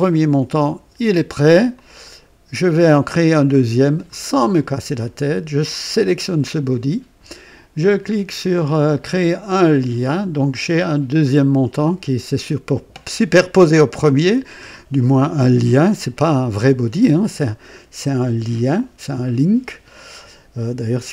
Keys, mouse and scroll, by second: 0.0-1.4 right drag, 1.7-4.2 drag, 5.6 click, 9.5 click, 21.0 alt+scroll up 2.